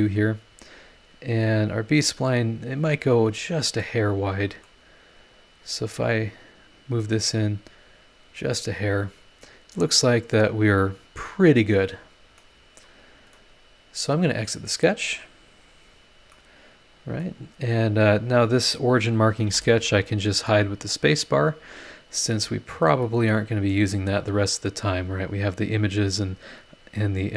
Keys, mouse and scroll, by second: 0.7-1.2 scroll up 4, 3.4 scroll down 2, 3.8-4.8 middle drag, 5.8 click, 7.5 click, 8.9 click, 11.8-12.4 scroll down 4, 12.4-13.5 middle drag, 14.7 click, 15.5 click, 16.3-17.4 middle drag, 18.2 click, 19.5 space, 20.5 click, 20.6 right click, 21.5 scroll down 1, 22.4 scroll up 1, 23.0 middle click, 23.1 click, 23.1 right click, 24.0 scroll down 2, 26.1 scroll up 2.